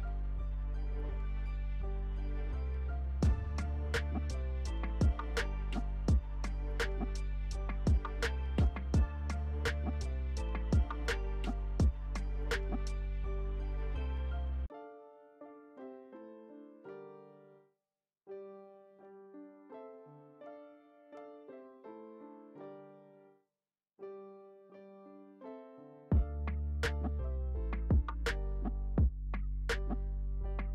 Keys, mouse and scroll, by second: 16.4 alt+click, 19.9-30.7 alt+drag.